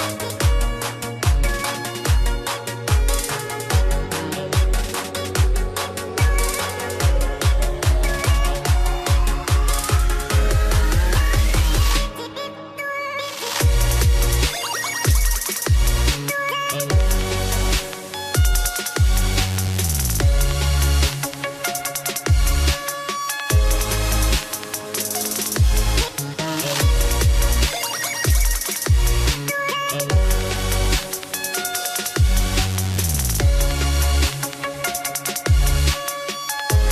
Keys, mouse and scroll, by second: 1.4 click, 2.5 ctrl+click, 5.5 click, 6.3 click, 7.7 shift+click, 9.9 click, 10.7 click, 13.0 click, 17.9 click, 19.9 click, 24.0 click, 27.1 click, 27.9 click, 29.7 ctrl+c, 30.0 click, 32.0 right click, 32.7 click, 33.7 ctrl+v, 35.5 click, 36.3-36.9 scroll.